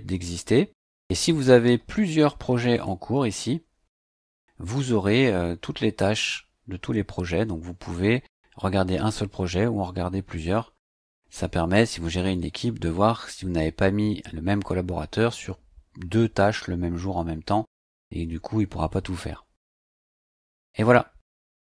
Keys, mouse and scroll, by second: 1.9-2.3 scroll up 2, 2.7 click, 3.5-3.8 scroll up 2.